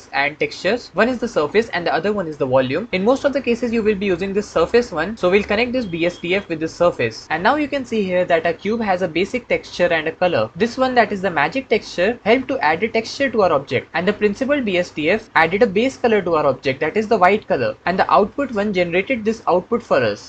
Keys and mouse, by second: 5.7 click, 5.8-6.8 drag.